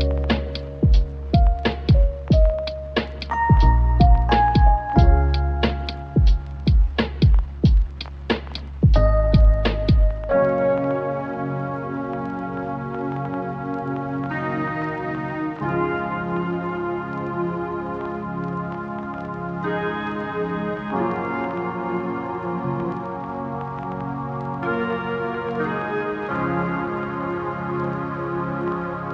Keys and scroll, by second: 2.2 ctrl+z, 3.6 Tab, 14.6 ctrl+z, 19.8 F2, 23.9 8.